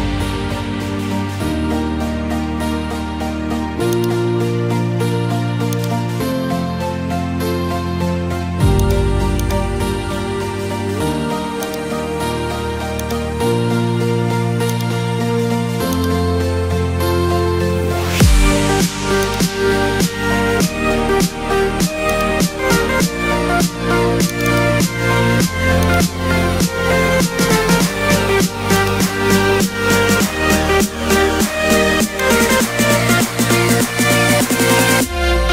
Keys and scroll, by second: 26.4 0.